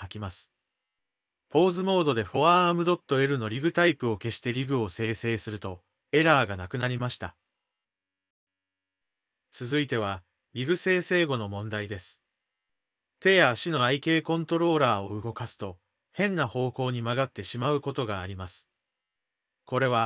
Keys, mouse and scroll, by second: 0.2 Tab, 1.2 click, 5.3 Tab, 7.3 click, 10.6 Tab, 12.3 g, 15.5 click, 16.1 g, 19.0-20.0 drag.